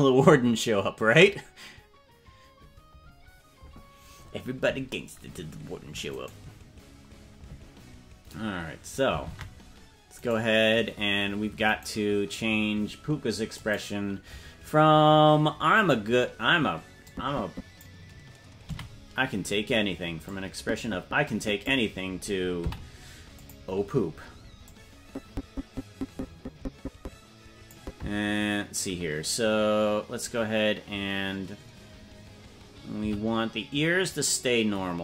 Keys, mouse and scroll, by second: 6.5 right click, 9.5 ctrl+Tab, 10.8 right click, 12.1 right click, 14.0 click, 17.2-18.2 drag, 19.1 a, 20.7-22.0 drag, 23.0 i, 25.2-28.0 drag, 32.9 c.